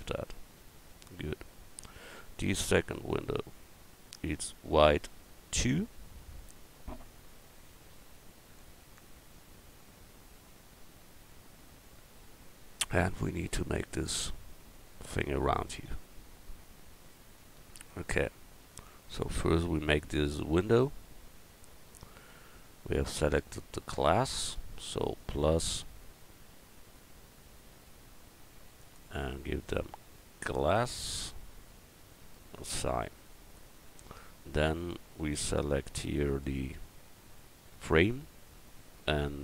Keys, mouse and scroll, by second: 0.0-1.5 drag, 20.4 click, 21.3 Tab, 25.2-27.7 drag, 32.7-34.1 drag, 35.0 a, 36.4 l.